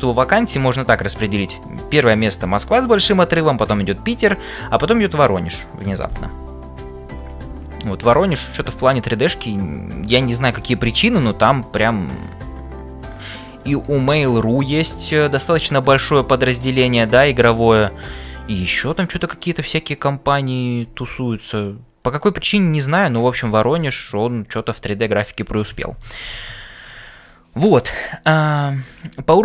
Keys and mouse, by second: 8.4 shift+middle click, 8.9-11.1 middle drag, 16.8 click, 17.7 g, 18.7 g, 19.9 click, 20.9 f, 22.0 click, 22.6 f, 23.8 shift+middle click.